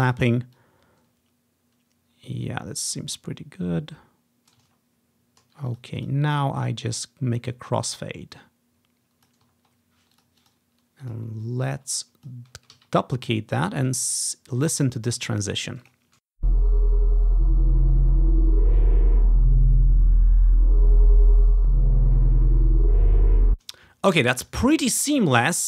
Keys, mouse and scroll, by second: 4.9-5.8 ctrl+scroll down 1, 9.7 ctrl+scroll down 1, 10.6 ctrl+click, 11.2 click, 11.7-12.0 ctrl+scroll down 1, 12.2 click, 12.9 alt+d, 13.8 click, 13.9-15.0 ctrl+drag, 13.9 typing, 14.1-15.3 ctrl+scroll up 1, 15.3 ctrl+scroll down 1, 16.0 click, 16.3 space, 17.1-17.6 ctrl+scroll up 2, 23.5 space.